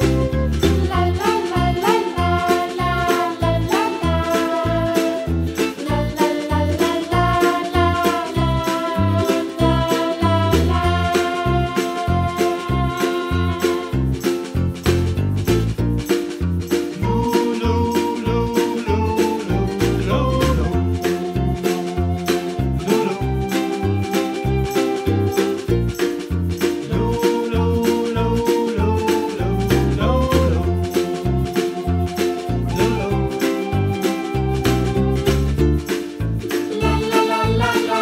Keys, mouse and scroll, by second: 1.5-2.0 scroll down 4, 2.0 middle click, 2.5 click, 3.6 KP_Decimal, 3.9-4.3 scroll down 4, 4.8 Tab, 5.3 click, 5.8 click, 6.4 2, 6.6 click, 6.9 alt+click, 7.3 g, 8.7 3, 9.0 click, 9.3 shift+click, 9.7 shift+click, 10.0 shift+click, 11.1 e, 13.6-14.8 middle drag, 14.8 g, 16.0 e, 17.6-18.8 middle drag, 18.8-19.5 scroll down 1, 19.5 middle click, 20.2-21.0 scroll up 2, 21.0-22.3 scroll down 1, 22.9 click, 23.1 scroll up 1, 23.4 middle click, 24.3-25.2 scroll down 5, 24.5 middle click, 25.2-26.4 middle drag, 26.4-26.7 scroll up 4, 26.7-28.0 middle drag, 28.2 shift+right click, 28.5 shift+a, 29.9 s, 30.8 h, 31.1 g, 31.5 ctrl+z, 32.1 g, 32.8 middle click, 33.6 click, 34.3 g, 35.1 g, 36.7 s.